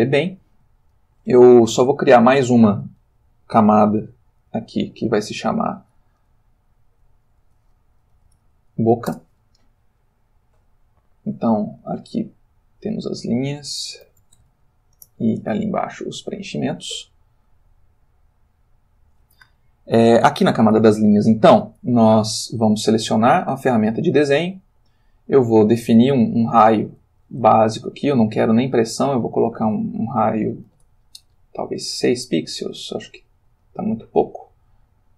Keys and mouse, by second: 0.8 ctrl+shift+middle click, 0.9 shift+click, 4.4 click, 5.2 click, 7.4 shift+b, 8.1 o, 8.3 c, 8.4 a, 9.1 Return, 11.0 click, 12.7 click, 13.8-14.4 typing, 14.9 shift+Return, 23.5 click, 26.6 click, 27.6 ctrl+z, 28.6 click, 29.1 click, 30.6 6, 30.8 Return, 31.9 click, 33.4 ctrl+z.